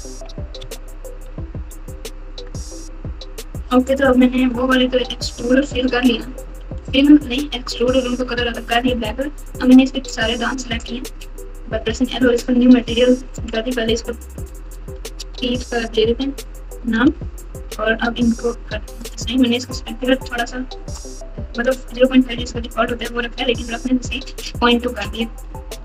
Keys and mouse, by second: 0.0 ctrl+KP_2, 0.6 KP_Subtract, 1.5 KP_Subtract, 1.8 KP_Subtract, 2.4 KP_Add, 3.5 KP_Multiply, 5.3 Tab, 5.7 Tab, 7.3 Tab, 8.0 Tab, 9.8 Tab, 13.3-16.9 drag, 18.9 click, 25.7 Tab.